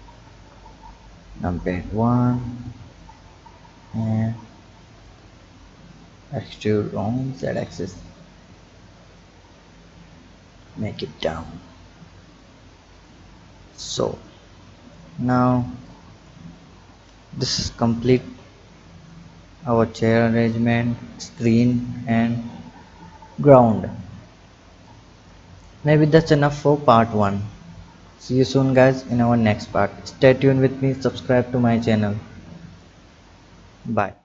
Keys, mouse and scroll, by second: 0.3 KP_1, 1.6 click, 2.5 b, 5.0-8.1 drag, 8.1 Tab, 9.3-11.5 drag, 13.0 click, 13.6 click, 15.8-16.6 drag, 16.6 scroll up 1, 18.0 click, 20.9-22.5 middle drag, 24.1-24.8 scroll down 1, 24.8 click, 26.0-30.0 drag.